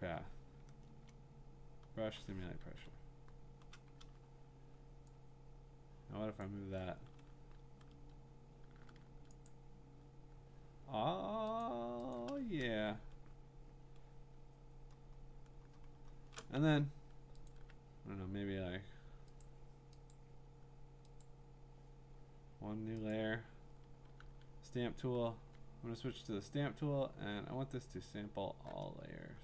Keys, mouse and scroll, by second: 0.9 Return, 2.7 ctrl+d, 6.4-8.7 drag, 9.0 a, 9.5 click, 11.6 click, 12.1 click, 12.7-14.5 scroll, 14.5-15.4 scroll, 15.8 scroll, 17.5 click, 19.4 click, 20.1 click, 21.2 click, 23.1 click, 27.1 s.